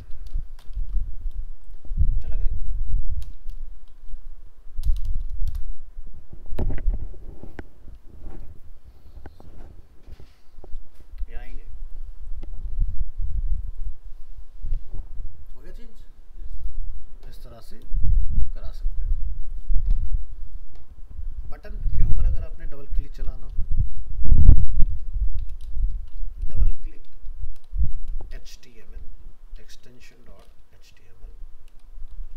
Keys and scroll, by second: 0.8 ctrl+s, 4.1 alt+Up, 23.0 alt+f, 27.7 shift+Left, 31.8 shift+Left.